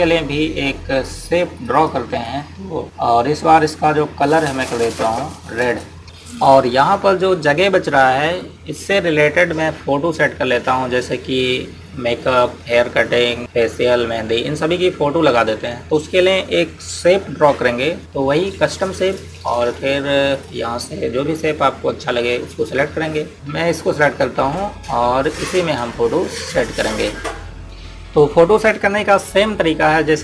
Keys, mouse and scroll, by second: 19.6 click, 27.6 Down, 27.7 click.